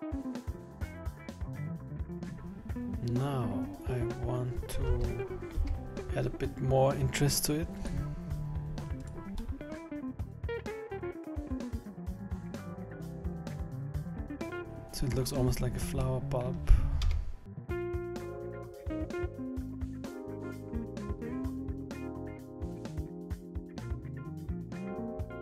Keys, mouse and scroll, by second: 0.0 g, 0.9-1.2 scroll up 6, 1.0 middle click, 1.1 middle click, 1.2 scroll down 4, 1.3 middle click, 1.3 scroll down 9, 1.6 middle click, 1.6 scroll up 6, 2.0 middle click, 2.1 middle click, 3.0 middle click, 5.0 Tab, 5.4 middle click, 5.6 Tab, 6.3-7.2 scroll up 3, 7.8 click, 8.6 scroll up 2, 9.0 right click, 9.6 middle click, 9.7 middle click, 9.8 shift+right click, 9.9 middle click, 10.0 shift+right click, 10.1 middle click, 10.1 shift+right click, 10.1 middle click, 10.2 shift+right click, 10.3 shift+right click, 10.4 shift+right click, 10.5 middle click, 10.5 shift+right click, 10.7 shift+right click, 10.7 shift+right click, 10.9 middle click, 10.9 scroll down 4, 11.0-11.3 shift+right click, 11.0 scroll up 3, 11.1 shift+right click, 11.1 shift+right click, 11.3 scroll down 3, 11.4 middle click, 11.4 scroll up 3, 11.5 shift+right click, 11.6 shift+right click, 11.6 shift+right click, 11.7 shift+right click, 11.7 middle click, 11.9 shift+right click, 12.0 middle click, 12.1 shift+right click, 12.2 shift+right click, 12.3 shift+right click, 12.4 shift+right click, 12.4 middle click, 12.5 scroll down 6, 12.6 middle click, 12.8 scroll up 4, 12.8 s, 13.8 middle click, 14.4 scroll down 1, 14.5 middle click, 14.5 scroll down 5, 15.5-16.0 scroll up 3, 16.0 middle click, 17.1 KP_1, 17.6 scroll down 11, 17.9 KP_7, 18.2 scroll up 7, 18.5 scroll down 2, 18.8 s, 21.0 scroll up 3, 21.2-21.9 scroll down 2, 21.9 scroll up 1, 22.0-22.7 scroll down 1, 22.7 scroll down 2, 23.9 a, 24.2 a, 24.2 b, 24.8 scroll down 3, 24.9 scroll up 3, 25.2 g.